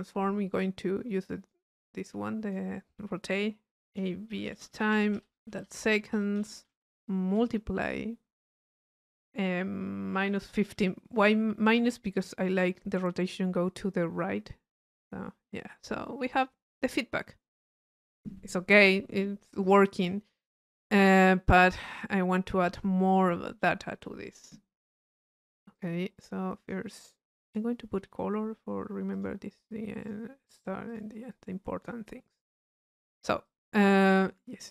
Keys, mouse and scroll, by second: 0.6-3.0 drag, 16.0 click, 19.9 click, 20.6-21.7 right drag, 21.7-23.2 drag, 23.2 right click, 24.0 click, 25.1 middle click, 25.7-27.1 drag, 27.5 click, 29.2 click, 30.1 click, 30.9-32.2 drag, 32.6-34.5 right drag, 33.5-34.5 drag.